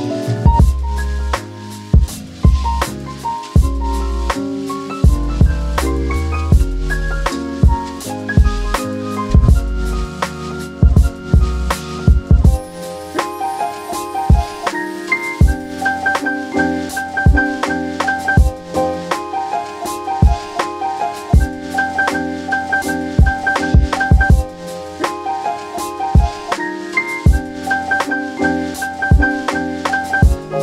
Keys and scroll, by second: 15.1 2, 15.1 Tab, 20.5 space.